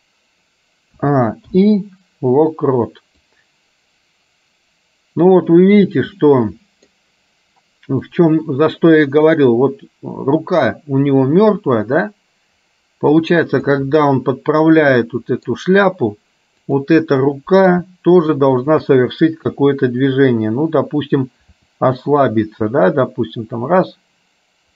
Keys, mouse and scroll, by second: 1.1 a, 1.7 i, 3.3-6.1 drag, 6.3 middle click, 8.3-13.4 drag, 13.7 middle click, 15.2 middle click, 16.7 click, 17.4 middle click, 18.8 shift+click, 19.6 KP_3, 21.6 r.